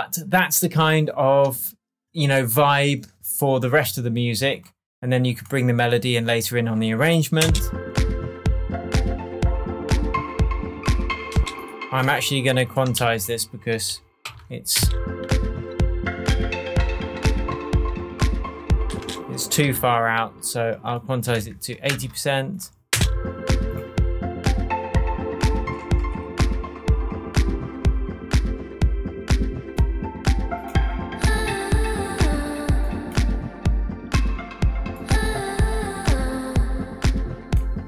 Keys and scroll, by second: 7.4 space, 11.3 space, 12.9 super+a, 14.2 super+u, 14.7 super+space, 15.5 space, 18.9 space, 19.4 super+space, 19.6 shift+super+u, 21.0-21.8 typing, 22.9 space, 25.8 shift+Tab.